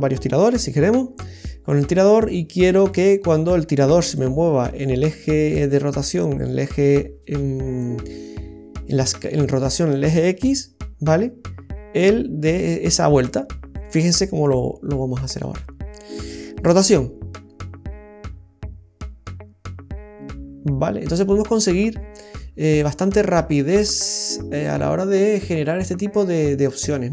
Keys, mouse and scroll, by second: 15.3 right click, 16.7 r.